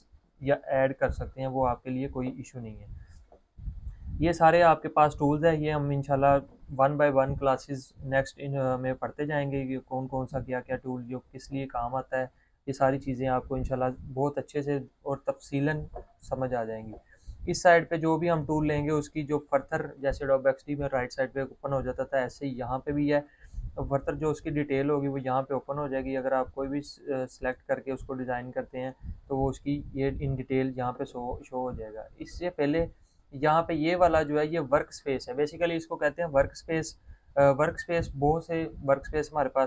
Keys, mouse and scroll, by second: 27.1 click.